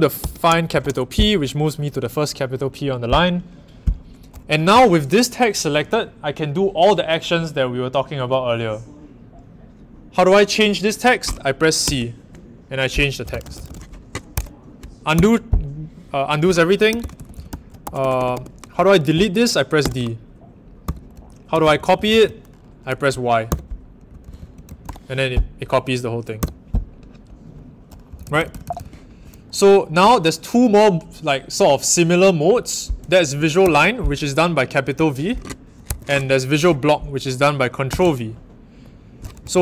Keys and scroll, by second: 0.0-0.7 typing, 11.8 c, 12.9-14.1 typing, 14.3 Return, 15.1 m, 16.6-19.7 typing, 20.8-25.3 typing, 26.3 typing, 28.0-28.7 typing, 33.6 shift+v, 35.8 Home, 37.8 ctrl+v, 39.4 Home.